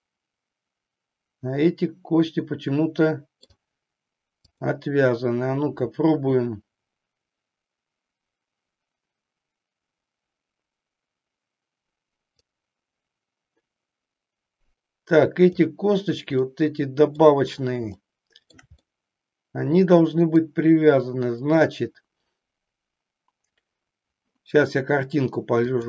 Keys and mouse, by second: 4.4 click, 12.5-15.4 drag, 16.5 middle click, 18.0 shift+middle click, 19.0-20.5 middle drag.